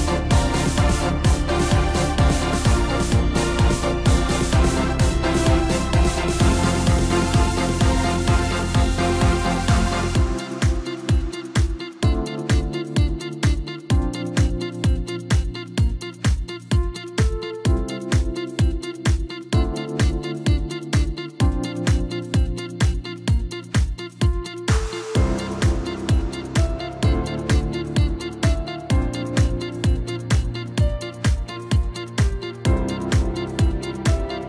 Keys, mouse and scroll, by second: 2.3 e, 4.4 ctrl+KP_Add, 5.0 ctrl+KP_Add, 6.1 g, 9.1 g, 10.9 g, 12.9 g, 15.6 shift+d, 20.5 g, 23.5 scroll down 3, 23.7-24.7 middle drag, 24.7-25.6 scroll up 2, 25.6 Tab, 25.9 scroll down 4, 26.2-28.4 middle drag, 28.4 KP_7, 29.6-31.7 drag, 31.7-32.6 scroll up 1, 32.6 s.